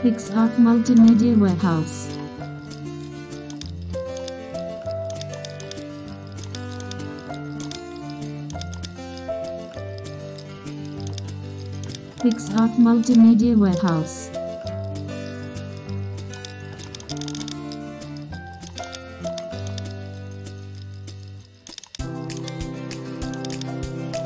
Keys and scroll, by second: 3.8 super+e, 4.9 super+t, 7.9 alt+shift+m, 8.7 super+space, 10.6 alt+shift+n, 11.2 super+0, 12.3 super+space, 15.0 super+c, 15.6 super+n, 16.1 super+v, 16.2 super+space, 17.5 super+0, 17.8 alt+shift+super+f, 18.1 super+0, 19.0 super+w, 20.0 super+d, 22.0 super+0, 22.8 shift+super+F2.